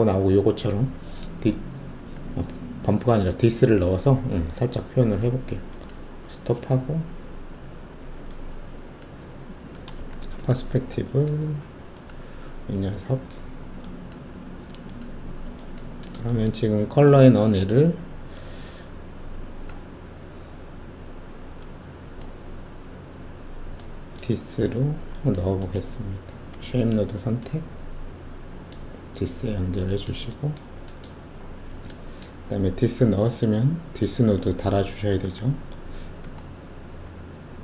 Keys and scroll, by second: 10.1 alt+shift+q.